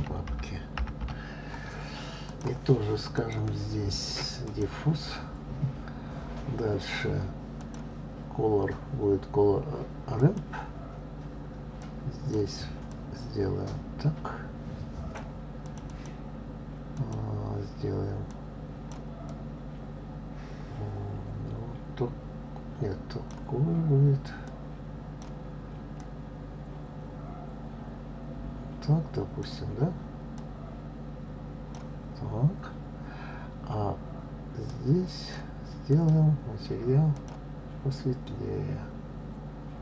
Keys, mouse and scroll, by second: 4.1-7.1 drag, 8.5-11.5 drag, 12.7 click, 13.8-17.3 drag, 17.9 click, 35.6-37.0 drag.